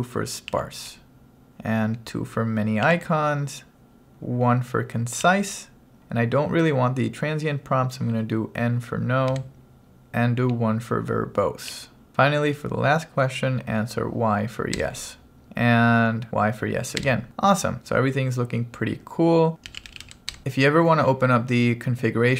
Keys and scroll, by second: 0.5 2, 2.9 2, 5.3 1, 9.3 n, 11.7 1, 14.8 y, 17.0 y, 19.4-20.7 typing.